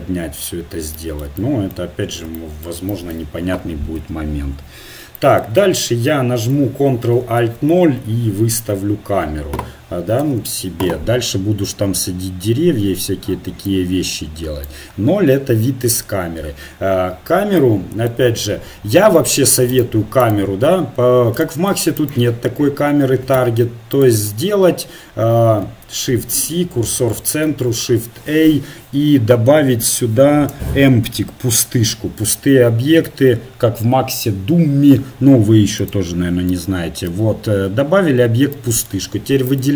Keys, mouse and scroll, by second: 1.5 middle click, 4.0 KP_1, 7.2 ctrl+alt+KP_0, 10.1 t, 10.2 n, 14.0-15.4 drag, 15.4-18.1 middle drag, 19.8-23.3 right drag, 23.4 Tab, 26.5 shift+c, 27.5 shift+a, 36.5 middle click, 38.3 click, 39.5-39.7 right drag.